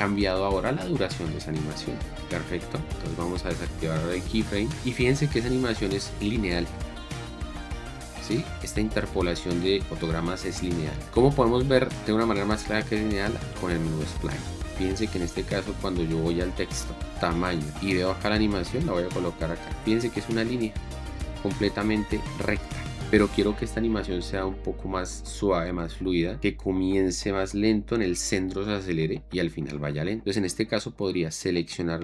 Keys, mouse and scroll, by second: 6.8 space, 8.5 space, 14.9 click, 17.5 click.